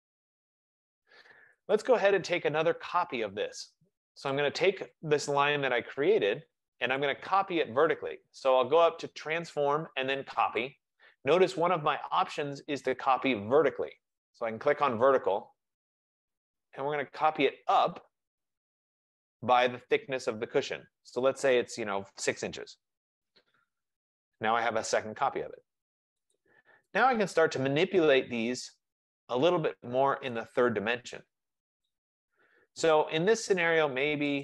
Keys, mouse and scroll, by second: 1.9-4.5 drag, 2.8 F15, 7.1 right click, 9.5 right click, 10.8 click, 15.7 click, 16.5 click, 21.0 click, 22.5-23.3 typing, 24.6 Return, 26.4 click, 30.4 right click, 31.9 click.